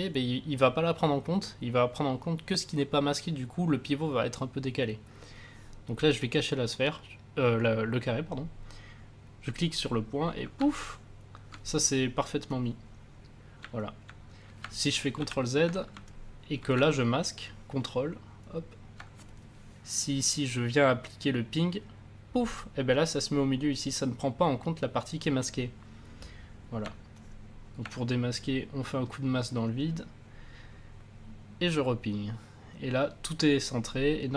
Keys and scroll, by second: 15.1 ctrl+z.